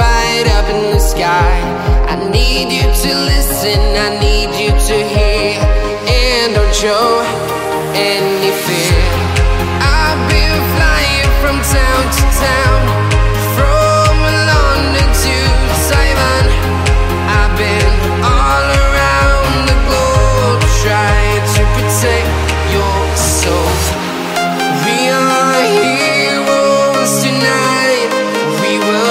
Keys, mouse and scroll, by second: 0.2 scroll up 1, 1.0-2.1 right drag, 2.1 scroll down 1, 2.7 right click, 3.6 click, 4.1 scroll up 1, 7.3 click, 8.5-9.2 scroll, 9.9 scroll up 1, 10.0 click, 12.7 click, 13.4-14.0 scroll down 1, 14.0 scroll up 1, 14.3 right click, 14.6 click, 15.2-15.6 scroll down 1, 15.7 right click, 16.3 click, 17.9 click, 18.4 scroll down 1, 19.1 right click, 19.3 click, 19.9 right click, 20.5 click, 21.1 right click, 21.8 ctrl+z, 22.9 ctrl+z, 23.5 click, 23.7 right click, 24.3 click, 25.7 click, 26.4 right click, 26.7 click, 27.2 right click, 27.4 click, 27.9-29.1 scroll down 1.